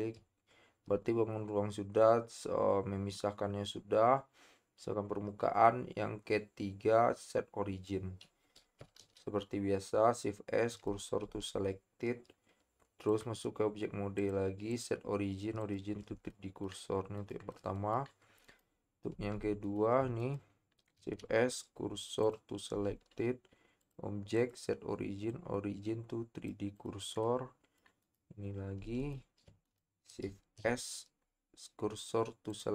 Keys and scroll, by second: 9.1 shift+s, 11.2 Tab, 21.0 shift+s, 22.7 Tab, 29.4 shift+Tab, 30.6 s.